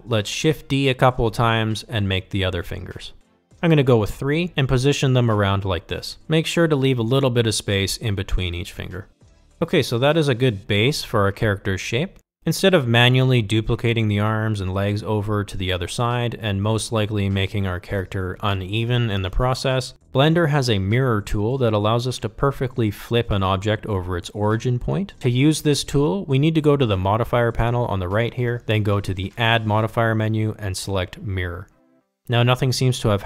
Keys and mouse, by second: 2.3 shift+d, 3.4 r, 4.3 g, 5.0 r, 5.6 g, 7.4-10.6 typing, 11.7 r, 12.3 g.